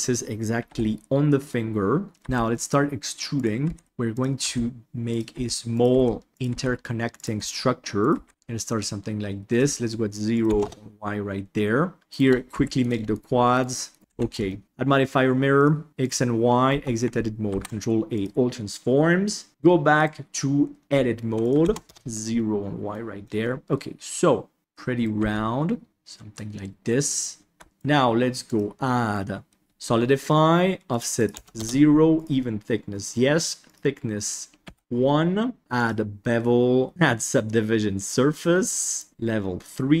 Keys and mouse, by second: 0.6 KP_7, 2.1 e, 3.6-8.3 typing, 10.3 click, 12.0 shift+right click, 12.4 f, 12.7 right click, 13.0 shift+click, 13.4 shift+click, 14.0 alt+z, 14.4 shift+middle click, 15.9 click, 16.6 Tab, 17.4 ctrl+a, 19.9 Tab, 19.9 right click, 21.4 click, 22.3 middle click, 23.3-24.6 middle drag, 24.6 g, 24.9 right click, 25.1 g, 25.9-27.3 middle drag, 25.9 g, 27.6 Tab, 27.6 middle drag, 28.4-29.6 drag, 30.9 click, 31.3 click, 32.1-34.8 drag, 34.8-35.6 middle drag, 35.6 click, 38.8 click, 39.6-40.0 middle drag.